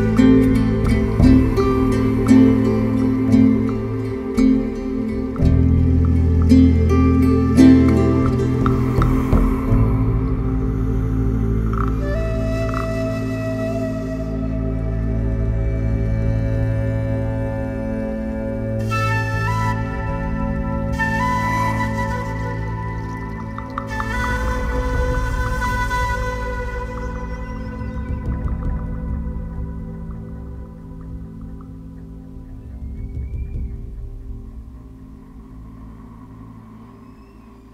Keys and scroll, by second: 2.0 ], 7.3 ], 20.0 ctrl+z, 32.2 4, 36.6 3.